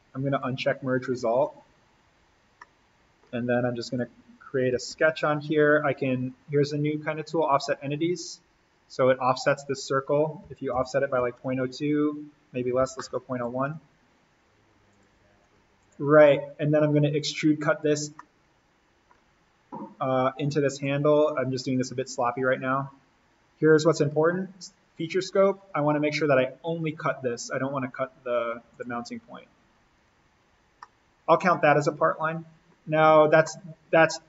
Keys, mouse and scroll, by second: 0.4 click, 2.6 middle click, 3.8 click, 4.9 s, 7.5 click, 8.6-10.4 scroll down 1, 10.2-13.5 typing, 13.6 Tab, 14.9 click, 17.7-18.4 scroll up 1, 18.4 scroll, 19.6-20.0 scroll up 1, 20.8-25.6 drag, 30.4-30.8 scroll down 1, 30.8-32.9 middle drag, 32.9-33.2 scroll up 1, 33.4-34.2 middle drag.